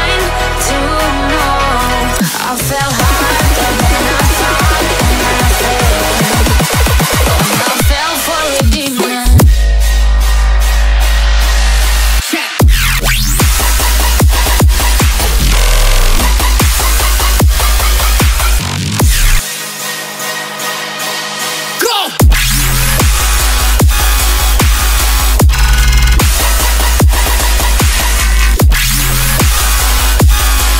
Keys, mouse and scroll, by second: 1.7 shift+click, 2.4 shift+click, 2.9 shift+click, 3.5 shift+click, 4.5 shift+double click, 5.0 shift+click, 5.6 shift+click, 7.0 middle click, 12.9 middle click, 14.9 shift+click, 15.6 shift+click, 17.3 shift+click, 18.2 shift+click, 19.5 middle click.